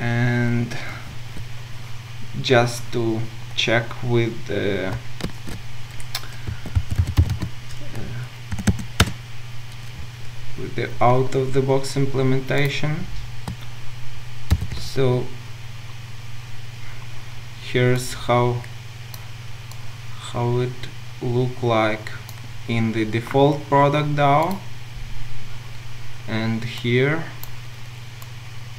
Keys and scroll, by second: 5.4 ctrl+shift+super+a.